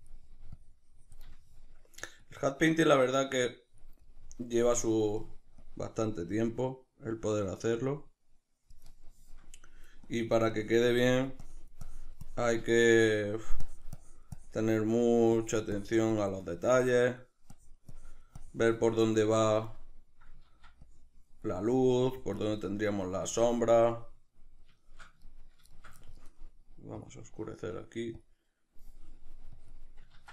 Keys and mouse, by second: 1.4 shift+middle click, 2.2-4.1 drag, 4.1-5.6 middle drag, 5.6-9.1 drag, 9.1-10.1 shift+middle drag, 10.1-12.7 drag, 12.7 shift+middle click, 13.7-14.8 drag, 14.8 middle click, 15.4-16.6 drag, 16.6 shift+middle click, 17.5-21.5 drag, 20.5 ctrl+z, 21.5 middle click, 22.1 click, 22.9-29.6 middle drag, 29.6-30.3 drag, 30.2 ctrl+z.